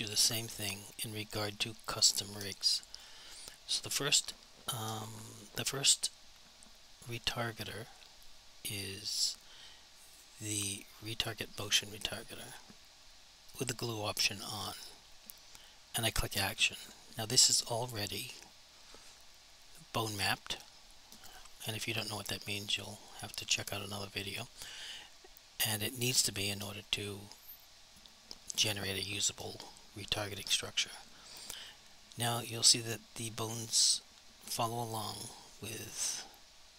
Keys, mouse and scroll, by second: 9.1 click, 22.8 click, 31.8 click.